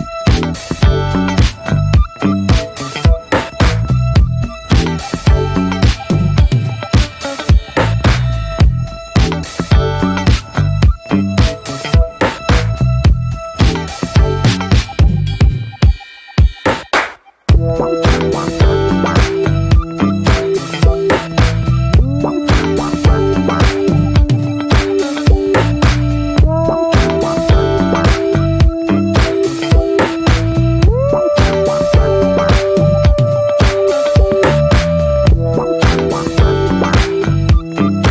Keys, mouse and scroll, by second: 2.4-2.8 middle drag, 2.8 ctrl+b, 5.3 click, 5.5 scroll down 2, 5.7 middle click, 6.0 ctrl+s, 6.1 scroll down 1, 6.3-6.6 shift+middle drag, 6.6 scroll up 1, 6.7-7.5 scroll down 3, 6.9 middle click, 7.5-8.6 shift+middle drag, 8.6 ctrl+s, 8.8-9.2 shift+middle drag, 9.2 scroll down 1, 9.4-10.4 middle drag, 10.4 ctrl+s, 11.9-12.3 scroll up 1, 12.3 middle drag, 12.5 Tab, 12.8 shift+middle click, 13.0 scroll up 3, 13.2 Tab, 13.4 drag, 13.5 Tab, 13.7 scroll up 1, 14.0-14.9 shift+middle drag, 14.9-15.6 scroll up 2, 15.1 shift+middle drag, 15.9 3, 16.1 drag, 17.5 ctrl+r, 20.7-21.0 alt+shift+drag, 21.4 shift+middle click, 22.2 shift+d, 22.8 middle click, 23.0 e, 26.3 ctrl+z, 28.4 scroll up 1, 28.7 middle click, 29.0 scroll up 1, 29.2-29.7 shift+middle drag, 29.7 s, 31.7-32.3 middle drag, 32.3 click, 32.6 alt+shift+drag, 32.9-33.8 middle drag, 33.8 alt+shift+click, 34.1-34.9 middle drag, 34.9 ctrl+b, 37.3 scroll down 2, 37.4 Tab, 37.6-38.1 middle drag.